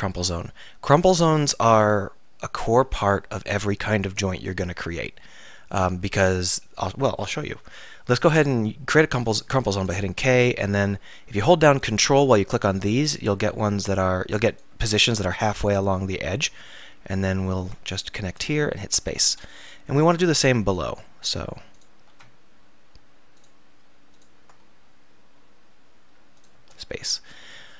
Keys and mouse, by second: 9.1 k, 20.0 k.